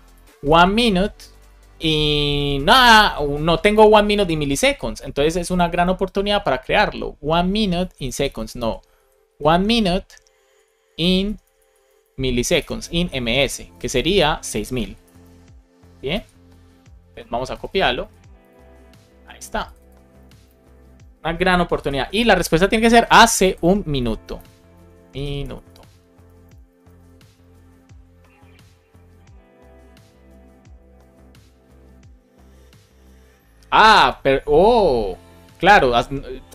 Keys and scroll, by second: 0.0-0.9 typing, 1.2 Down, 3.6 Return, 4.9 super+Caps_Lock, 7.9 shift+super+Right, 8.1 super+Caps_Lock, 8.3 super+c, 8.5 Right, 8.8 Return, 9.2 super+v, 10.3 Left, 10.6 Left, 11.2 BackSpace, 12.6-13.6 typing, 13.6 Right, 13.9 Right, 15.0 0, 16.0 super+s, 17.7 super+Caps_Lock, 17.9 super+c, 20.0 super+Caps_Lock, 20.1 super+v, 20.4 super+s, 21.9 shift+Caps_Lock, 23.9 Right, 24.3 Right, 24.4-25.6 typing, 27.3 super+s.